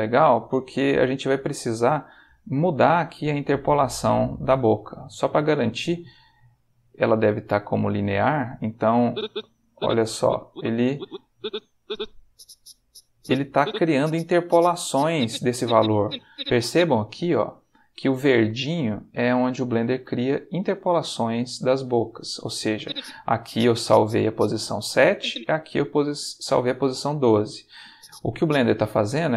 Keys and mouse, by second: 1.0 click, 4.3-7.2 drag, 9.0-16.5 drag, 22.8-24.5 drag, 25.0 click, 27.9 click.